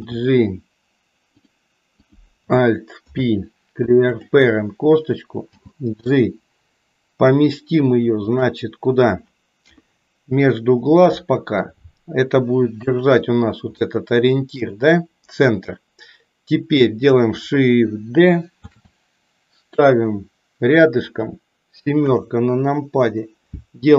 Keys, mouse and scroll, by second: 1.9 click, 2.9 alt+p, 5.4 g, 9.7 KP_1, 11.7-13.0 drag, 13.9 shift+middle click, 18.7 shift+d, 22.1 KP_7.